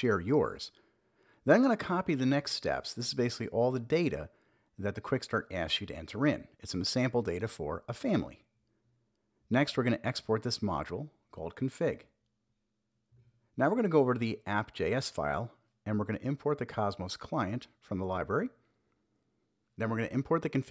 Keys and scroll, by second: 3.2 super+s, 7.4 super+Down, 8.1 Return, 8.2 super+v, 9.0 super+s, 11.1 super+p, 11.3 a, 11.9 Return, 13.4 super+v, 14.9 super+b, 16.3 Return, 16.9 super+v, 17.8 super+v, 19.1 Return, 19.4 super+s.